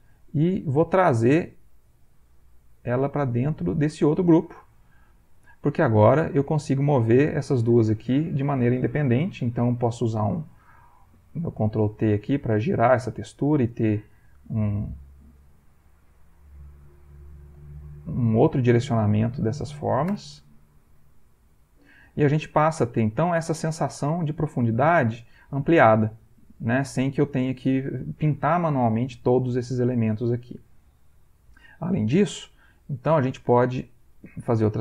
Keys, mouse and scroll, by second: 0.1 Escape, 1.1 click, 2.5 click, 6.1 click, 7.4 click, 8.2 ctrl+middle click, 8.5 ctrl+click, 9.8 ctrl+t, 10.5 ctrl+click, 11.8-13.0 drag, 14.4-16.5 drag, 16.8-19.7 drag, 20.1 Return, 21.1 ctrl+middle click, 22.9 middle click, 23.1 ctrl+click, 24.9 click, 25.5 ctrl+click, 26.5-27.5 drag, 29.9 click, 30.5 ctrl+middle click, 31.3 ctrl+middle click, 31.8 ctrl+middle click, 33.2 click, 34.4 click.